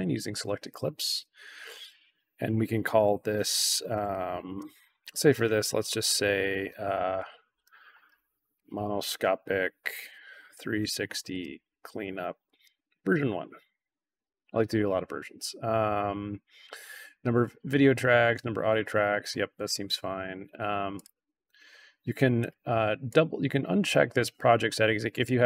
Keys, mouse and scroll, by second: 6.9-14.2 typing, 20.9 click, 22.3 click, 23.0 click, 25.2 click.